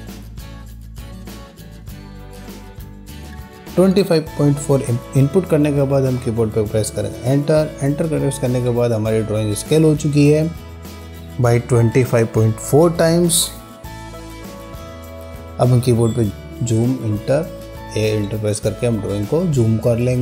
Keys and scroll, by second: 0.0 4, 7.4 Return, 16.1 z, 16.3 Return.